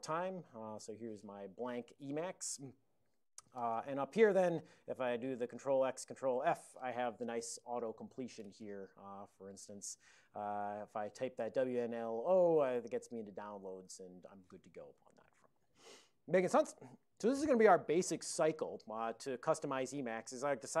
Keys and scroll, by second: 0.0-0.3 typing, 2.5 super+Up, 5.6 ctrl+x, 6.1 ctrl+f, 11.3-12.2 typing, 12.6 Return, 13.9 ctrl+d.